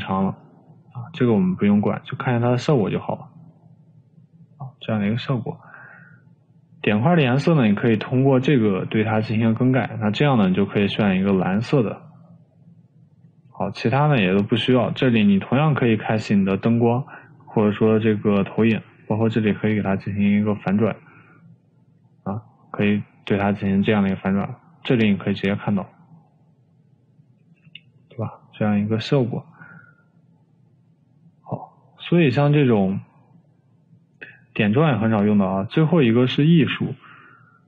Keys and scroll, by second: 28.7 Escape.